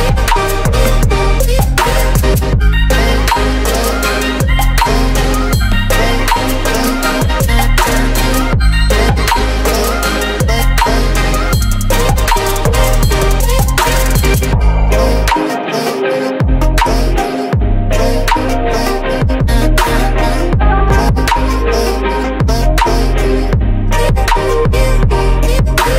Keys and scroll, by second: 0.3 space, 23.4 Caps_Lock, 23.5-25.6 typing.